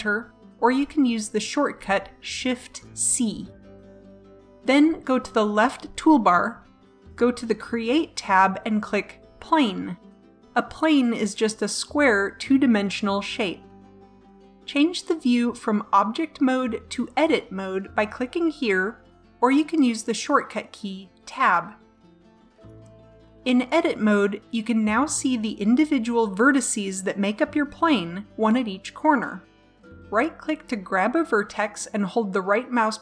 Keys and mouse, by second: 7.0-8.9 drag, 9.3-10.7 drag, 11.2-12.4 middle drag, 23.5-24.7 middle drag, 26.5 a, 30.3-31.9 right drag.